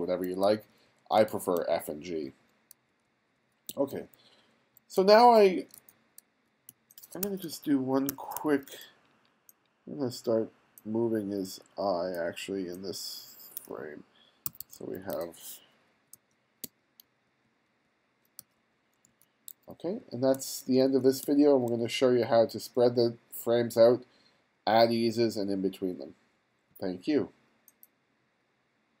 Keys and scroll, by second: 0.5 f, 1.6 g, 2.8 f, 3.7 g, 5.0 f, 6.7 g, 8.1 2, 14.6 1, 16.2 f, 16.7 g, 18.4 f, 19.5 g, 20.4 f, 21.3 g.